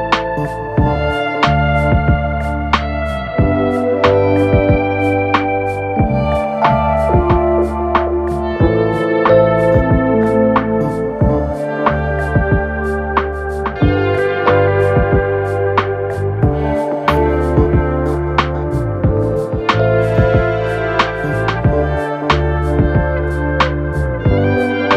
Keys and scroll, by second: 8.2 ctrl+-.